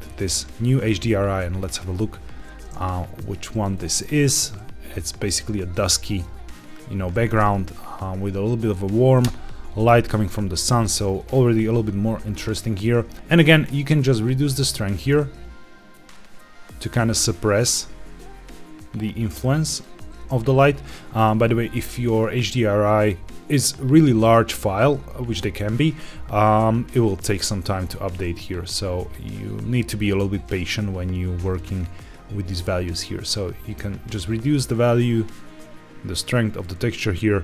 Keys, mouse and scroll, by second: 2.7 middle click, 3.2 scroll down 2, 3.6 shift+middle click, 4.0-6.1 middle drag, 6.2 scroll down 1, 9.1 KP_0, 10.7-11.1 scroll up 1, 11.2 shift+middle click, 11.8-12.1 scroll down 1, 12.5 shift+middle click, 13.1 scroll up 1, 13.4-19.8 shift+drag, 27.1 shift+click, 30.5-31.6 shift+drag, 34.3-36.2 shift+drag.